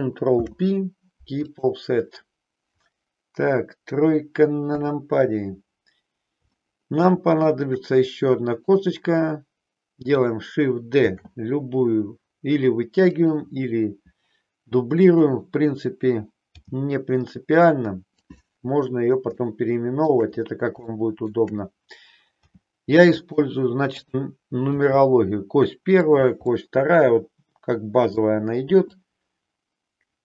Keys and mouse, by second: 0.2 ctrl+p, 4.6 KP_3, 6.5-7.5 shift+middle drag, 8.6 click, 11.1 shift+d, 14.9 click, 16.6 g, 18.3 click, 19.6 shift+middle click, 20.9 shift+middle click, 22.3 g, 23.9 click, 24.8 g, 26.6-28.3 middle drag, 28.8-30.2 drag.